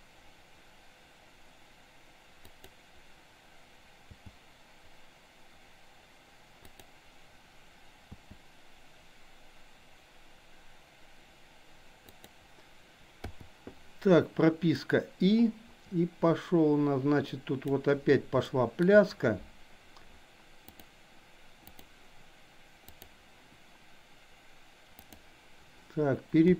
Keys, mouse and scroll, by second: 4.2 g, 8.1 r, 13.3 i, 14.9-17.8 drag, 18.4-18.9 shift+middle drag, 21.7 click, 22.8 click, 24.9 click, 26.4 g.